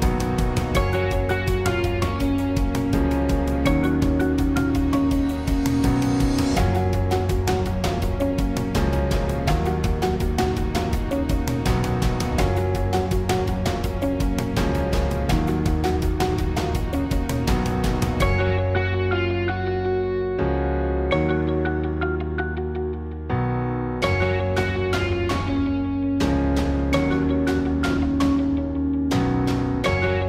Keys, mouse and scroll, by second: 0.6 a, 0.6 KP_1, 1.8 z, 2.4 z, 3.3 Tab, 7.5 click, 7.6 Tab, 9.0 click, 11.4 click, 11.8 space, 13.4-14.5 drag, 14.5 s, 15.1-16.5 drag, 17.2-20.2 drag, 22.1 Tab, 23.4 click, 23.8-25.5 right drag, 24.7 s, 28.2 s, 29.3 click, 29.9-30.2 typing.